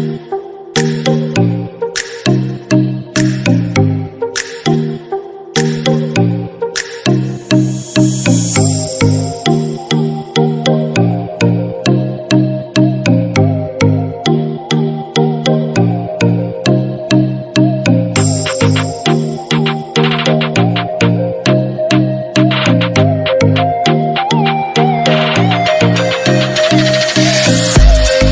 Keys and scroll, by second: 2.5 ctrl+-.